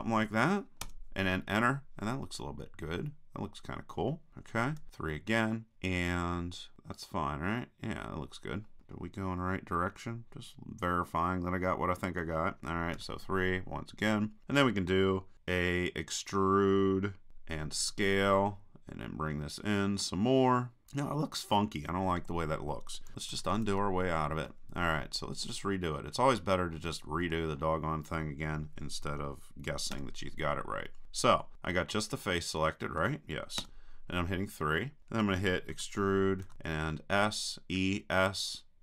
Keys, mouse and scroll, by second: 2.5 click, 4.3 middle click, 4.8 KP_3, 9.0 click, 9.1-12.0 middle drag, 13.0 KP_3, 15.7-18.5 drag, 17.3 e, 23.1 super+z, 23.3 super+z, 23.7 super+z, 25.5-27.2 middle drag, 29.9 KP_3, 31.9 middle click, 32.1 click, 32.5 middle click, 32.6 click, 32.8 middle click, 33.6 KP_3, 35.7 e.